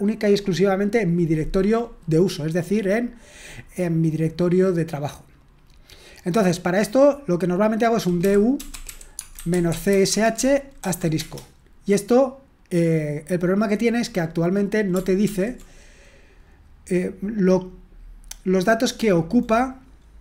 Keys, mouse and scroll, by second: 7.9-11.1 typing, 15.2 ctrl+p, 20.1-20.2 typing.